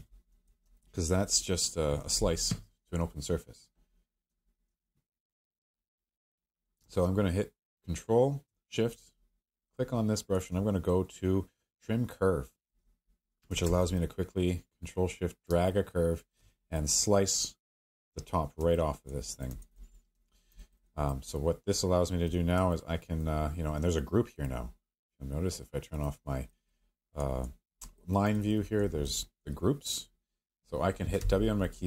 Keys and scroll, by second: 31.2 w.